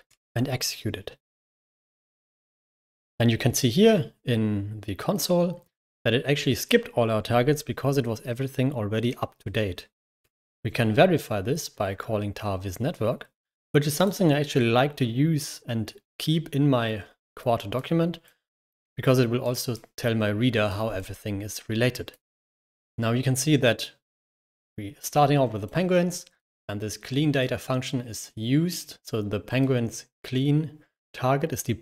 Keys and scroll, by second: 1.5 k, 2.6 ctrl+l, 10.1 ctrl+Return.